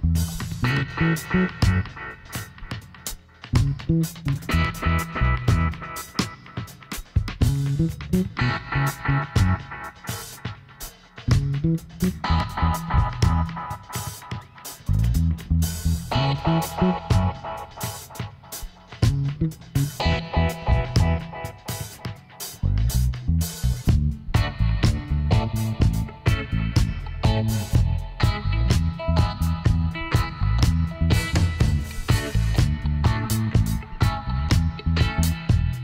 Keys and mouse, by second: 1.5 z, 4.1 s, 11.2 middle click, 11.4 Tab, 12.7 Tab, 14.1 click, 15.7 ctrl+r, 19.8 ctrl+r, 21.8 click, 22.6 middle click, 22.8 click, 23.6-24.6 middle drag, 25.4-34.6 middle drag.